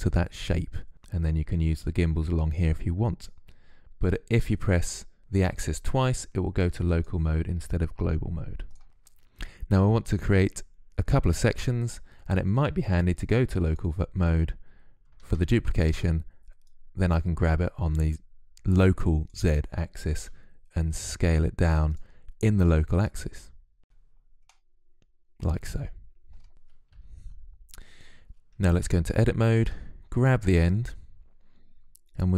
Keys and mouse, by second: 15.0 shift+d, 16.5-18.2 drag, 20.0 s, 22.5-24.2 drag, 25.6-26.7 middle drag, 26.7 KP_3, 28.6 Tab, 31.0 click, 31.6 middle click, 32.0 click, 32.3 middle click.